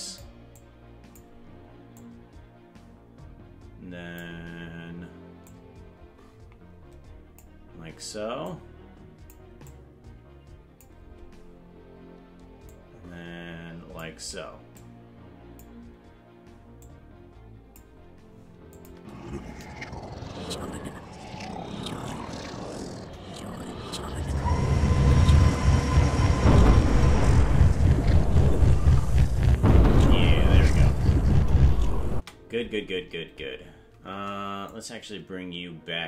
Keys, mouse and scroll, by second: 0.5 click, 2.0-4.3 drag, 5.4-7.4 drag, 8.4 click, 9.6-10.8 drag, 12.7-14.1 drag, 14.7 click, 16.8-17.8 drag, 18.8 click, 18.9 space, 22.9 KP_0, 29.4-32.1 typing, 34.7-36.0 drag.